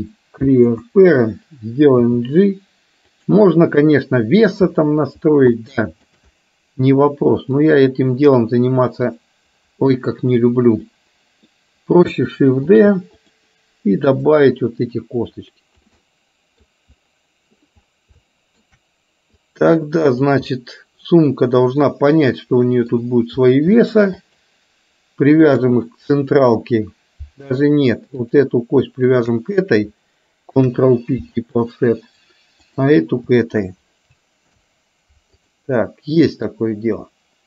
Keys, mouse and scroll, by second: 2.9 g, 3.5-4.6 middle drag, 5.6 shift+middle click, 7.7 click, 9.1-10.4 drag, 11.0 middle click, 13.2 shift+d, 14.4-15.9 drag, 16.1 middle click, 18.2-18.7 shift+scroll up 1, 19.4 click, 20.6-21.5 scroll up 1, 21.5-23.0 middle drag, 24.2 shift+click, 25.6 click, 28.1 click, 29.0 shift+click, 31.6 ctrl+p, 32.6 click, 33.5 shift+click, 34.8 ctrl+p, 36.2 middle click.